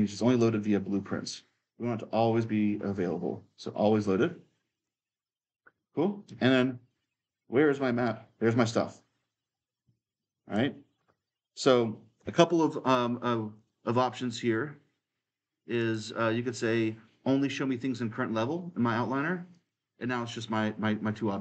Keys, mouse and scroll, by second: 4.5-6.0 drag, 6.0-12.3 right drag, 6.2 d, 7.5 w, 8.5 d, 9.9 s, 13.3-15.5 drag, 15.6-17.7 drag, 19.3-21.4 drag.